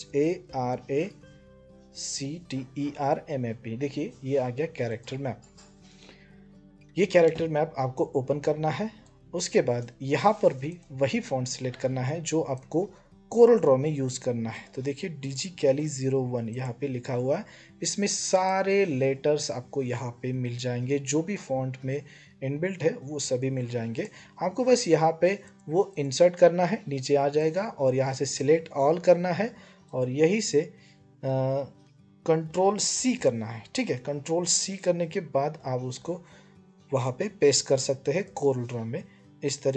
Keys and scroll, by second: 0.0-1.9 typing, 32.7 ctrl+c.